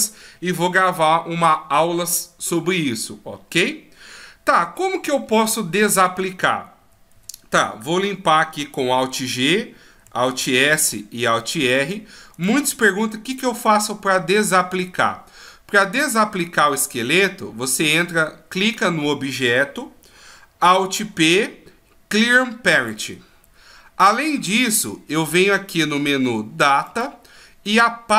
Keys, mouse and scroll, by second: 6.8 a, 7.1 a, 8.8 alt+g, 10.2 alt+s, 10.7 alt+r, 11.4 middle click, 12.3 right click, 20.8 alt+p, 26.8-28.1 click.